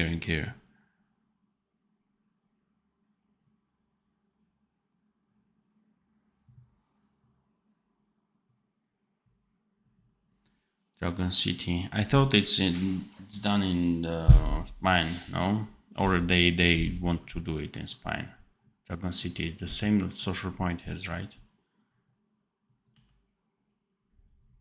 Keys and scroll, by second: 22.8 d.